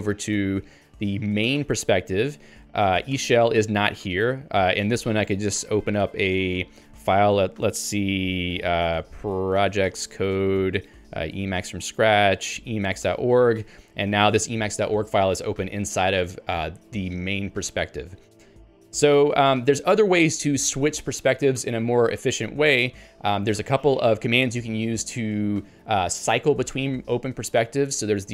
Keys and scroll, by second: 1.5 Return, 4.1 ctrl+g, 13.7 Return.